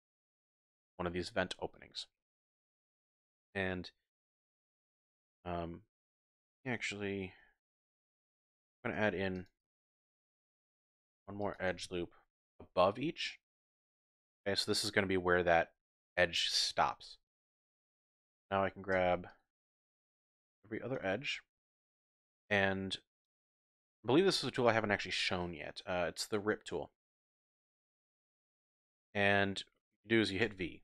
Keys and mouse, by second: 0.2 shift+click, 7.3 ctrl+r, 8.8 click, 8.8 typing, 9.1 ctrl+r, 9.4 click, 9.7 ctrl+r, 10.1 click, 10.3 ctrl+r, 10.8 click, 11.0 ctrl+r, 11.5 click, 11.8 ctrl+r, 14.1 click, 18.3 click, 19.3 shift+click, 19.3 typing, 20.3 shift+click, 21.7 shift+click, 22.3 shift+click, 23.2 shift+click, 23.7 click, 23.9 middle click, 24.3 shift+click, 24.7 typing, 30.4 v.